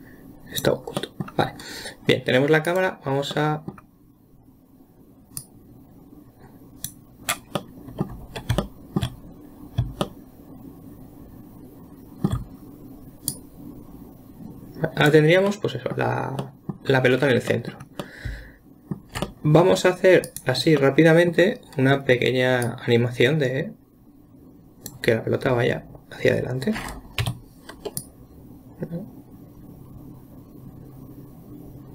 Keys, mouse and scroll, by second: 0.0-1.4 drag, 1.4-3.1 middle drag, 3.1 click, 3.7-5.8 middle drag, 5.8 drag, 8.0-13.4 middle drag, 13.7 click, 15.9-17.5 middle drag, 17.5-17.9 scroll down 2, 17.9-20.7 middle drag, 20.7 click, 21.2-23.1 middle drag, 23.1-26.1 drag, 28.4 click.